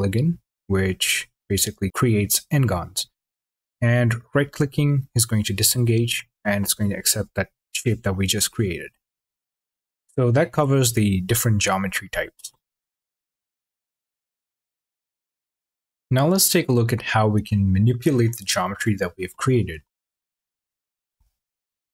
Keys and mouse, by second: 0.6 drag, 0.9 click, 1.3 click, 1.9 click, 2.7 click, 4.1 click, 15.0 click, 20.9 q.